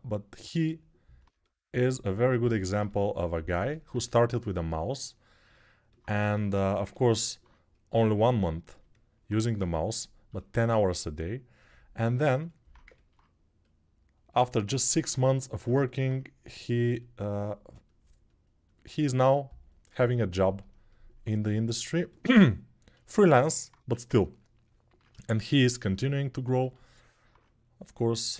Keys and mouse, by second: 5.2-9.0 alt+right drag, 6.1 g, 9.0-28.3 drag, 23.5 1, 25.5 typing.